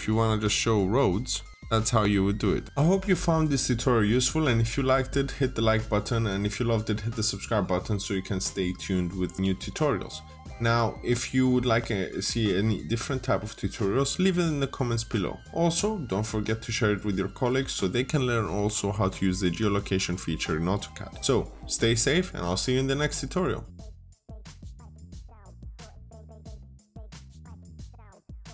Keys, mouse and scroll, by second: 1.1 scroll up 1, 1.5 middle click, 2.1 scroll up 1, 2.6 click.